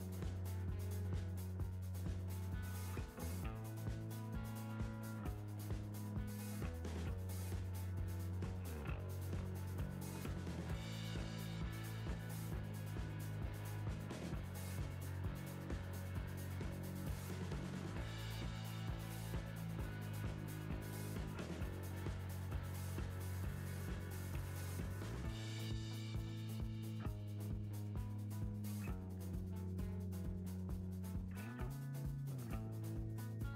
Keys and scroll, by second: 4.0 Right, 7.9 Right, 11.4 Right, 12.4 Right, 14.5 Right, 20.2 Right, 25.1 Right.